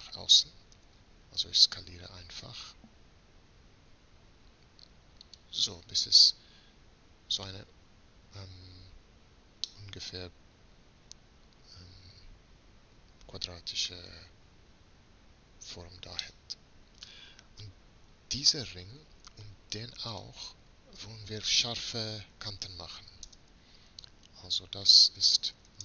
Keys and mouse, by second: 0.7 middle click, 0.8 s, 5.7-11.6 middle drag, 16.4 middle click, 23.3 space.